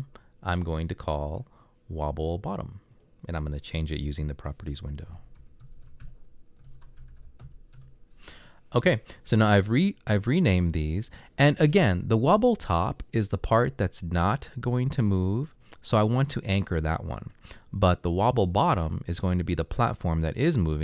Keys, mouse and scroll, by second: 5.0-8.7 typing, 11.7-12.4 typing.